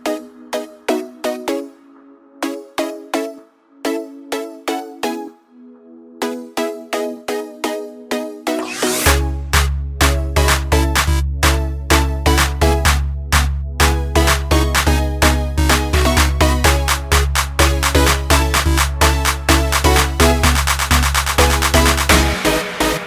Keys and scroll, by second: 3.0 ctrl+j, 12.4 ctrl+alt+z, 15.0 ctrl+alt+z, 17.5 ctrl+alt+z.